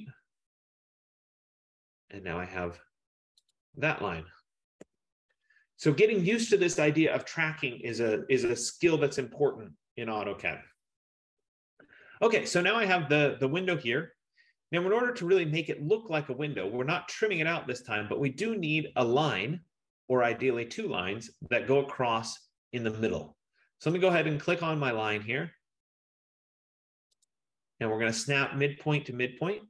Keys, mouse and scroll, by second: 0.0-0.4 typing, 3.6 click, 4.9 Return, 6.0 middle click, 24.3 click, 27.3 click.